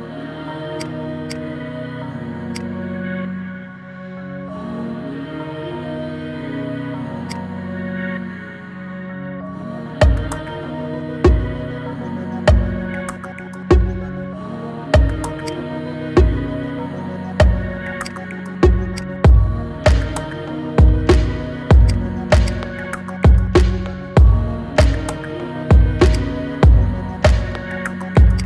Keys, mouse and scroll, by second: 0.1 Tab, 0.5 click, 1.0 click, 1.4 Tab, 2.3 click, 3.0 g, 8.2 Tab, 9.2 shift+d, 16.1-16.5 scroll up 3, 16.5 shift+middle click, 17.4-17.8 scroll down 3, 17.8 click, 18.8 click, 20.0 Tab, 21.7 click, 22.3 click, 23.4 Tab, 24.1 ctrl+a, 24.9 Tab, 25.9 shift+click, 27.4 ctrl+shift+b.